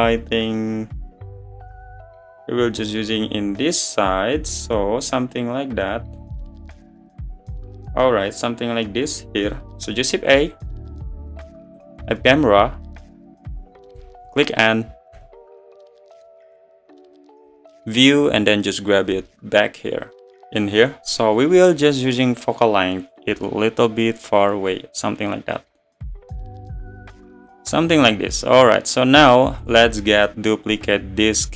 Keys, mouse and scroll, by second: 0.7 scroll down 2, 1.0 middle click, 1.8-2.8 scroll up 2, 2.8 scroll up 1, 3.2-3.6 scroll down 1, 3.6-8.1 middle drag, 8.1-8.6 scroll up 2, 8.6-9.0 scroll down 1, 9.0-11.8 middle drag, 11.8 shift+a, 12.9 drag, 15.1 n, 18.0 click, 18.4-20.0 scroll down 18, 20.5 g, 23.5-30.1 drag.